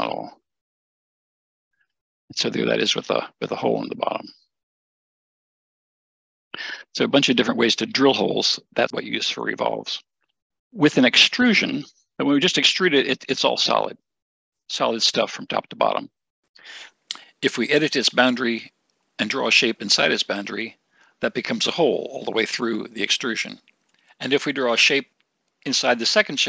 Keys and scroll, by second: 10.5 ctrl+shift+BackSpace.